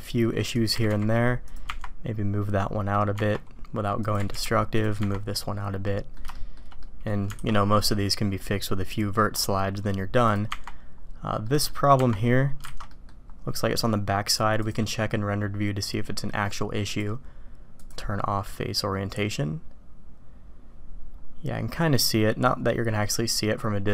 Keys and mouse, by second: 0.5 click, 0.7 g, 1.7 Tab, 2.6-2.9 drag, 3.9 click, 4.2 g, 5.0 Tab, 5.8 drag, 6.3 shift+click, 6.8 drag, 7.3 alt+a, 7.8-9.2 drag, 10.2 click, 11.4 click, 12.6 alt+a, 12.9 click, 14.6 click, 16.9-18.1 drag.